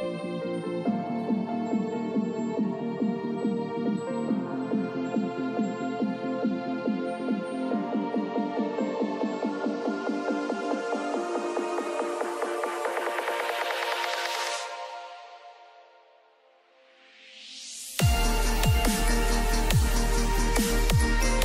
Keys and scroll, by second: 2.0 ctrl+shift+], 15.9 ctrl+shift+[.